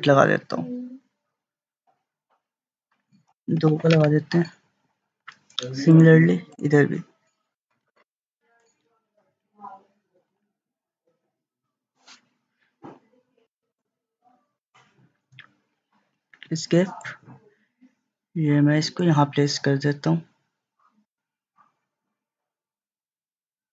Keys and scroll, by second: 3.6 2, 3.9 Return, 7.9 2, 8.3 Return, 16.4 Escape.